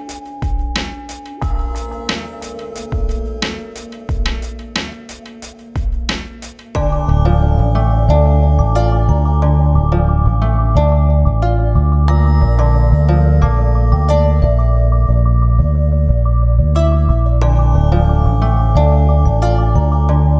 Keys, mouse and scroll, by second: 3.1 scroll up 1, 4.3-4.8 scroll down 1, 4.8 shift+Page_Up, 7.2 click, 7.6 ctrl+click, 7.9 F4, 9.0 click, 9.4 click, 10.7 right click, 11.4 click, 11.7 ctrl+click, 12.2 F4, 12.7-16.1 drag, 17.8-19.8 drag, 20.0 ctrl+s.